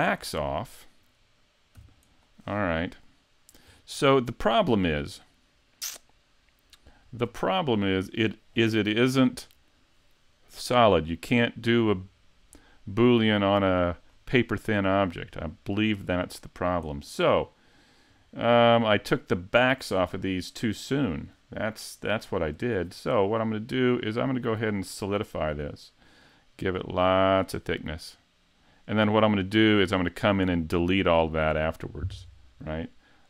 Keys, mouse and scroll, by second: 1.0 right click, 1.8 x, 2.6-3.0 scroll up 5, 3.0 middle click, 3.7-4.4 scroll down 9, 4.8-5.1 scroll up 2, 5.3 middle click, 7.1-7.4 scroll down 1, 7.5 shift+middle click, 11.2 middle click, 12.7 middle click, 14.1-14.9 scroll up 3, 14.5 middle click, 15.3-15.7 scroll down 3, 15.7 middle click, 16.2 right click, 18.1 click, 20.7 click, 26.0 click, 29.5 scroll down 2, 29.9 middle click, 31.0 middle click.